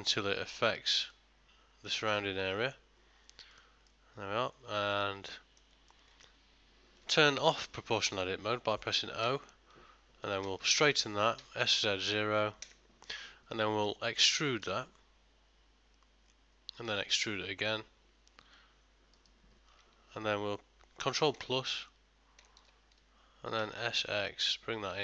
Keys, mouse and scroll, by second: 4.0 middle click, 5.5 ctrl+middle click, 6.0 middle click, 13.6 middle click, 14.8 e, 21.4 ctrl+KP_Add, 23.7 s.